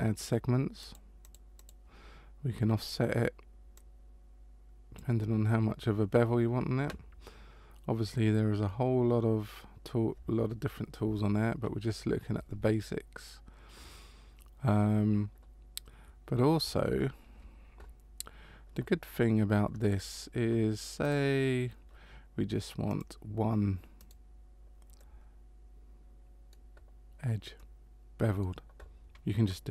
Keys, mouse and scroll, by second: 0.8 click, 1.2 click, 1.5 click, 3.7 click, 16.9 ctrl+z, 21.0 right click, 22.9 click, 24.0 right click, 25.0 middle click, 27.5 middle click.